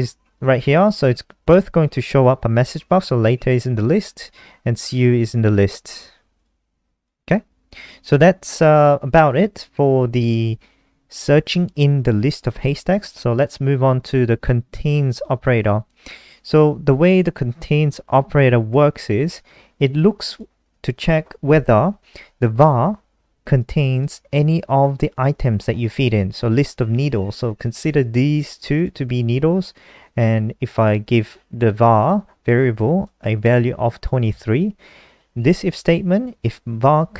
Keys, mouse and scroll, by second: 0.7 click, 0.8 click, 1.3 ctrl+s, 1.7 F5, 4.1 click, 7.6-11.8 scroll down 4, 11.8 click, 18.8 ctrl+c, 19.7 click, 20.4 click, 21.0 ctrl+v, 23.9 click.